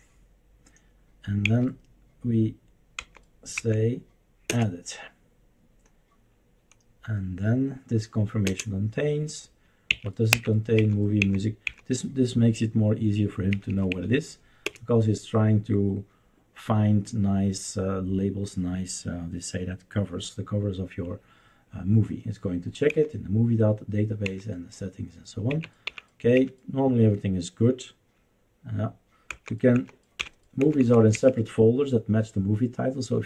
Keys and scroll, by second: 1.4 Down, 3.0 Down, 3.5 Down, 4.4 Return, 8.4 Return, 9.9 Up, 10.3 Up, 10.7 Down, 11.2 Down, 11.6 Down, 13.5 Up, 13.7 Up, 13.9 Up, 14.6 Return, 22.9 Down, 24.3 Down, 25.5 Right, 25.8 Up, 26.3 Up, 29.3 Down, 29.7 Down, 30.1 Left, 30.6 Down, 30.8 Down, 31.1 Up.